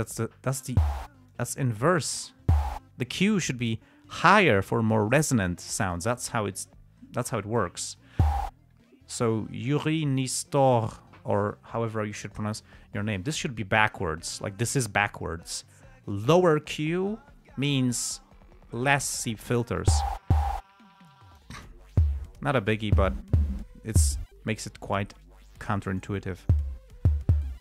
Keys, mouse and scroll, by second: 1.7 click, 6.8 click, 21.4 click, 22.9-23.4 drag, 24.0 click, 25.6 click.